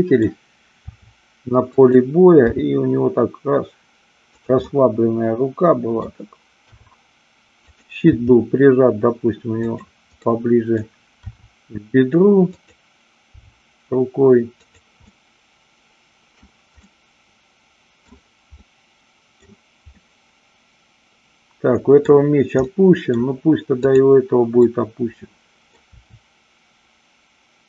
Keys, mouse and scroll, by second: 0.8 r, 1.8 click, 2.5 g, 4.3 click, 4.5-6.1 middle drag, 6.7 r, 7.7 click, 8.2 g, 9.7 click, 10.2-10.8 middle drag, 11.2 r, 12.5 click, 13.3 g, 14.5 click, 15.1-16.4 middle drag, 16.9-18.1 scroll up 1, 18.6-19.4 scroll up 2, 19.9-21.9 middle drag, 22.7 scroll up 2, 22.8 middle click, 25.1-25.8 middle drag, 25.9 r.